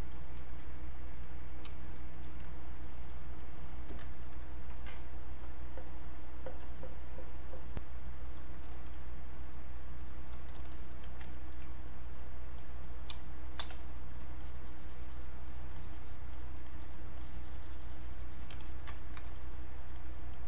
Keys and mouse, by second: 0.6 click, 1.7 space, 2.6 alt+click, 4.1 ctrl+right click, 7.7-9.0 drag, 9.0 click, 10.0 click, 11.3 ctrl+right click, 11.9 click, 13.1 space, 13.4 click, 13.9-18.1 alt+drag, 18.6 alt+click, 18.9 ctrl+right click, 19.3-20.4 alt+drag.